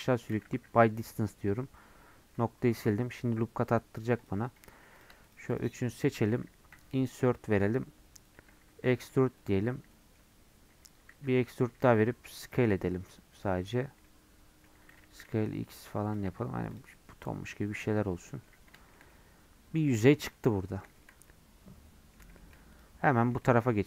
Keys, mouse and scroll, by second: 0.2 a, 0.8 m, 2.1 scroll up 2, 2.7 ctrl+r, 4.6 3, 5.0 click, 5.6 shift+click, 6.7 i, 9.9 middle click, 10.2 scroll up 1, 11.1 e, 14.0 middle click, 14.9 s, 16.3 Tab, 16.4 scroll down 2, 16.7 click, 16.9 middle click, 17.5 scroll down 4, 17.6 middle click, 17.9 scroll up 1, 18.3-20.1 middle drag, 20.1 scroll up 1, 20.3-22.7 middle drag, 22.7 click, 23.0 scroll up 1, 23.2 shift+middle click, 23.6 scroll up 2.